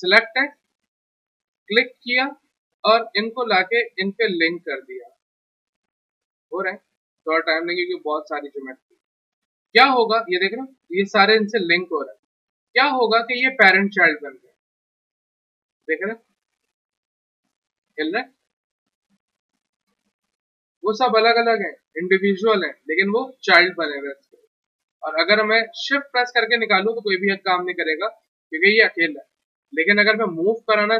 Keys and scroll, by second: 12.3 w, 18.0 ctrl+z, 20.6 ctrl+z.